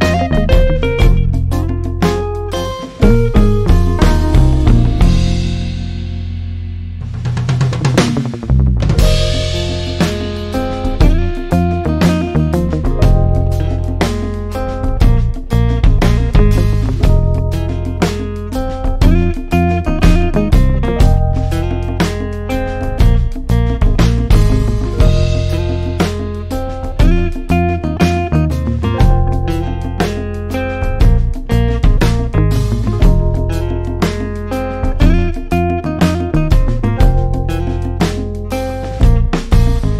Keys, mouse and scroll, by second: 17.1 ctrl+0.